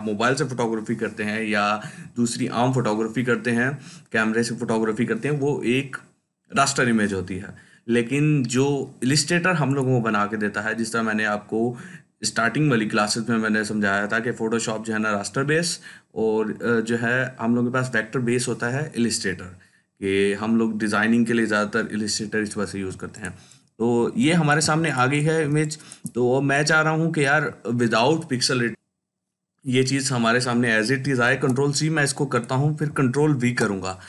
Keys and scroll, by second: 31.2 ctrl+c, 33.3 ctrl+v.